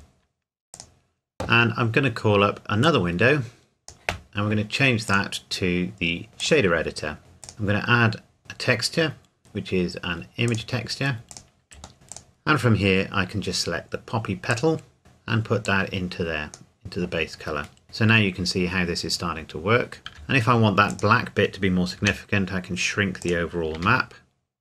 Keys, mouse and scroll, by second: 0.7 click, 7.2 scroll up 1, 7.4 click, 10.5 click, 11.9 scroll up 2, 12.1 click, 14.5 click, 15.7 click, 17.8-19.3 scroll down 1, 19.5-20.0 scroll up 1, 20.0 scroll down 1, 20.1 s, 20.9 click, 22.0 g, 23.2 click, 23.8 r.